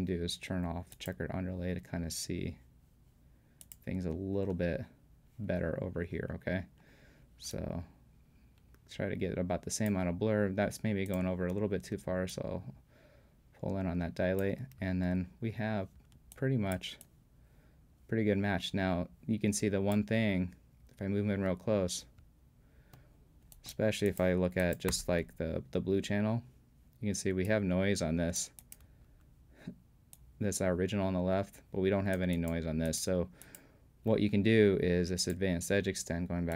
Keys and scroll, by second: 24.9 b, 28.9 b.